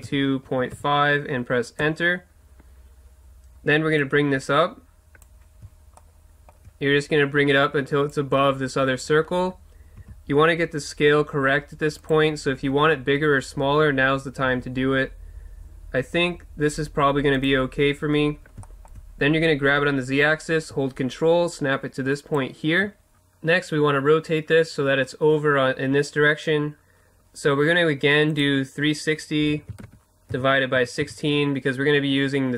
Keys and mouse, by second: 4.0-6.0 drag, 6.0-9.2 middle drag, 10.0 s, 14.4 s, 17.4-18.8 drag, 18.8 middle click, 19.7-21.3 drag.